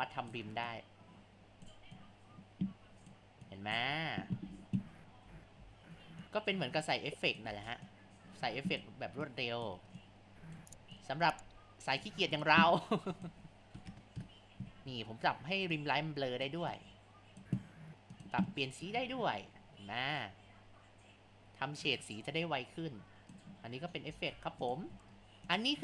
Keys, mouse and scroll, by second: 5.3 ctrl+z, 5.6 ctrl+z, 6.2-7.5 drag, 7.5 ctrl+z, 7.9-9.4 drag, 10.0-18.3 drag, 24.3 Tab, 25.5 click.